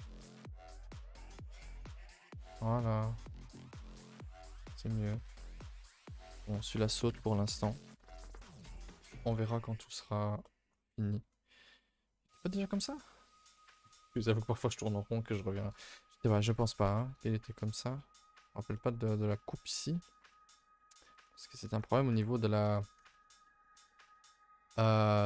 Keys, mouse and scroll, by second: 0.0 g, 1.0 middle click, 1.4 middle click, 2.0 g, 2.5 middle click, 3.1 middle click, 4.0 middle click, 4.8 middle click, 5.1 a, 5.2 a, 6.3 middle click, 7.1 ctrl+Delete, 7.3 a, 7.5 a, 7.8 ctrl+s, 8.0 2, 8.6 middle click, 8.8 a, 9.2 ctrl+s, 9.3 middle click, 9.5-10.5 middle drag, 10.5 middle click, 11.2-14.1 middle drag, 16.0 scroll up 1, 16.2 a, 16.3 a, 16.8 ctrl+s, 17.0 middle click, 17.3 middle click, 17.8 middle click, 17.9 middle click, 18.5 middle click, 18.8-21.0 middle drag, 21.1 middle click, 21.2-21.8 scroll up 1, 21.8 click, 23.4-25.2 middle drag.